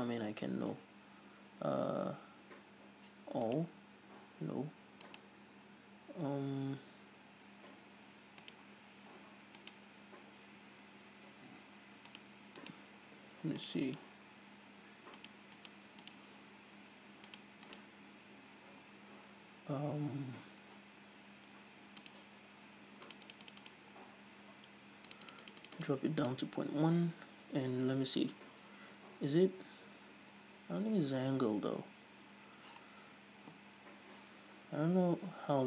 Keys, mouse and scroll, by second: 3.7-21.9 drag, 22.1-30.7 drag.